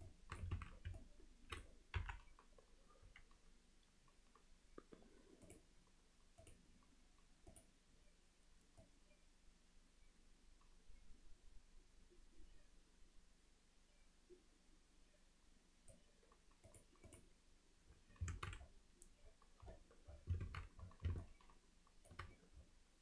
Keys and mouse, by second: 0.1-0.4 alt+middle drag, 0.6 alt+a, 1.0-1.6 alt+middle drag, 2.0 KP_1, 7.5 click, 16.7-17.2 drag, 17.9 middle click, 18.3 alt+a, 19.2 middle click, 20.5 alt+a, 21.2-22.2 alt+middle drag.